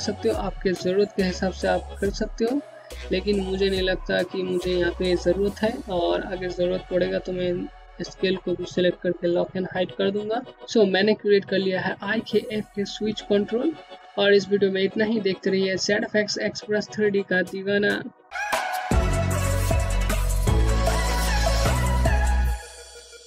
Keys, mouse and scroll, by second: 6.0 click.